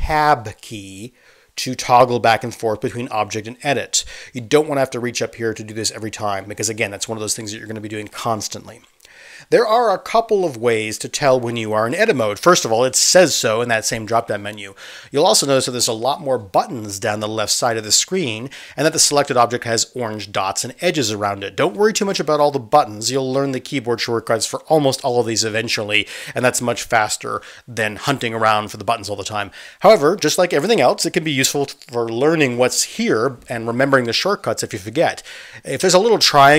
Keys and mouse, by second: 0.7 Tab, 1.9 Tab, 2.5 Tab, 3.0 Tab, 3.5 Tab, 4.0 Tab, 4.7 Tab, 5.2 Tab, 8.1 1, 8.9 2, 9.3 3, 9.7 1.